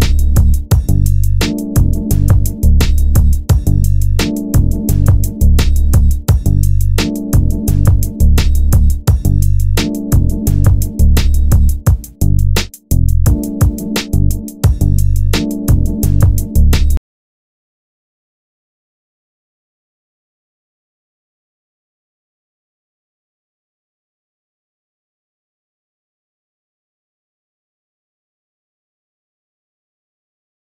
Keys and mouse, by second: 4.0 shift+a, 7.4 z, 9.0 click, 11.0 g, 16.8 Tab, 17.8 ctrl+Tab, 21.2 g, 28.9 a, 29.3 b.